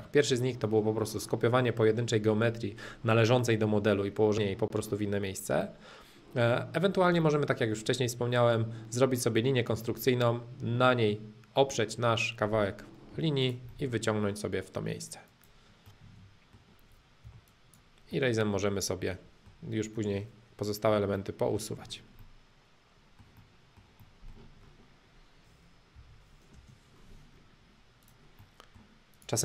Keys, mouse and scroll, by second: 1.1-3.1 drag, 5.7-7.7 middle drag, 9.3-11.4 middle drag, 13.1 p, 13.5 click, 13.7-15.3 middle drag, 15.3 click, 15.9-17.3 middle drag, 17.3 e, 17.5 click, 18.1-20.7 middle drag, 20.9 o, 21.1 middle click, 21.9 scroll up 2, 22.1-24.2 middle drag, 24.5-25.9 middle drag, 25.9 o, 26.5 space, 27.3 middle click, 28.1 click, 28.3 middle click, 29.1 click.